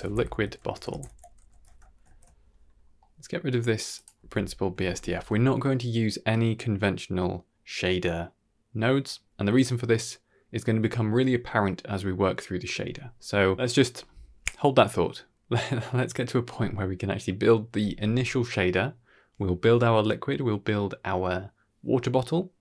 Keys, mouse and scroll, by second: 1.3 t, 1.9 ctrl+s, 2.6-3.2 scroll down 2, 2.9 middle click, 3.3 middle click, 3.8 click, 4.1 x, 4.7 ctrl+s, 14.4-15.6 middle drag.